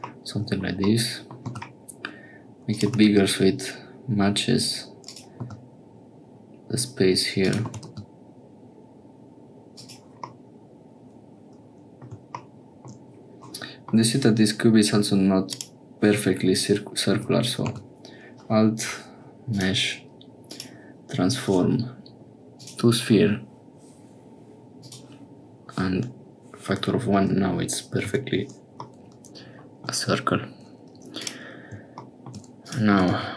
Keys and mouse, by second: 0.1 shift+click, 0.8 click, 1.4 s, 2.8 g, 5.4 s, 7.6 g, 10.3-12.1 drag, 13.6 click, 15.5 click, 17.1 Tab, 17.6 a, 19.5-24.9 drag, 28.1 Tab, 28.9 middle click, 29.4 click, 31.1 click, 32.6 click, 32.9 g.